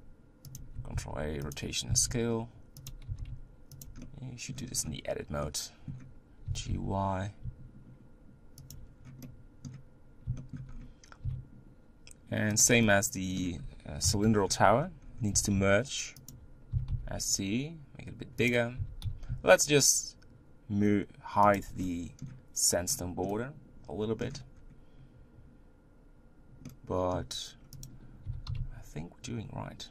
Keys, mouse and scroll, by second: 1.5 ctrl+a, 2.0 s, 3.1 g, 4.0 middle click, 4.7-5.1 scroll down 3, 5.4-6.5 middle drag, 6.5 g, 8.9 scroll up 1, 9.3-10.7 middle drag, 10.7-11.3 scroll up 2, 11.3 s, 12.8-14.0 middle drag, 14.0 KP_1, 15.1 scroll up 2, 15.3 g, 16.8 s, 18.8 g, 21.8-22.8 middle drag, 22.8 scroll down 1, 23.4 middle click, 24.3-24.7 scroll up 1, 24.7-26.2 scroll down 1, 26.7-27.8 middle drag, 27.8 click, 28.3 g.